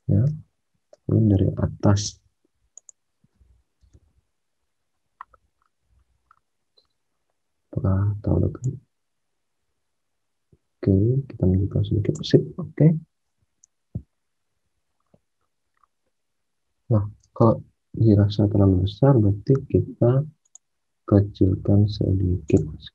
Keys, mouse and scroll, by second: 0.2 space, 3.8 space, 13.6 alt+Tab, 17.2 alt+Tab.